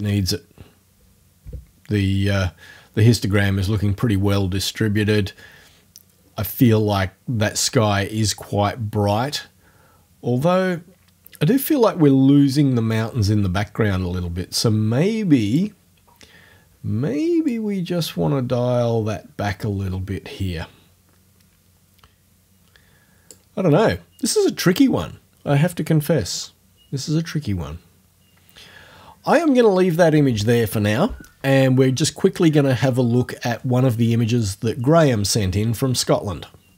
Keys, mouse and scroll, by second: 15.5 click, 17.5-23.5 drag.